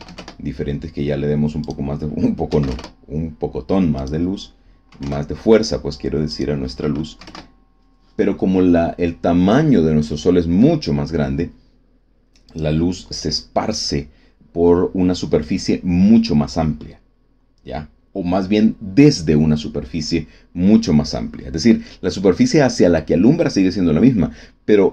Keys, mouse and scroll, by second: 0.1 KP_Enter, 1.6 click, 2.4 KP_1, 2.6 KP_Enter, 3.9 click, 4.8 KP_5, 5.0 KP_Enter, 6.2 click, 7.1 KP_1, 7.2 KP_Enter, 12.4 click.